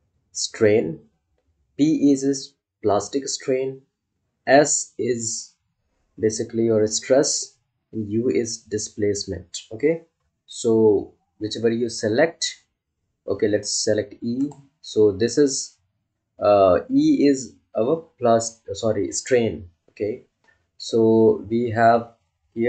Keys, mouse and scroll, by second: 14.3 click, 14.4 click, 21.9-22.6 scroll up 1.